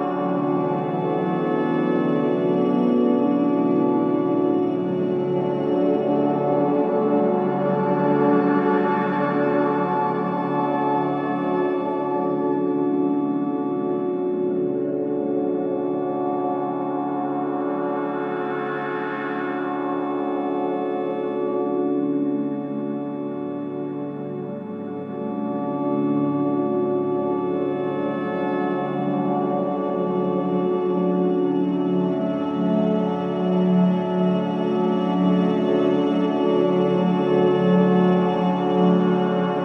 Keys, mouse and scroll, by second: 4.4 scroll down 1, 10.3 click, 15.9-20.3 drag, 20.3 scroll down 1, 21.1-22.0 scroll up 1, 22.2-24.8 drag, 24.8-31.4 drag, 31.4 click, 32.6 scroll down 1, 33.6-33.9 scroll up 1, 33.9 click, 34.6 scroll up 1, 34.7 scroll down 1, 35.9-38.1 drag, 39.3-39.6 drag.